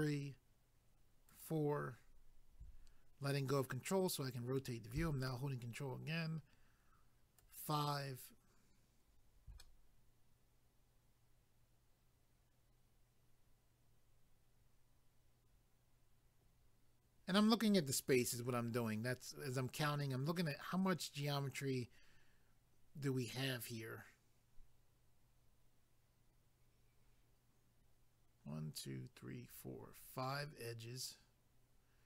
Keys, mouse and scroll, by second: 3.5 middle click, 7.4 ctrl+right click, 9.6 middle click, 31.1-32.0 scroll down 1.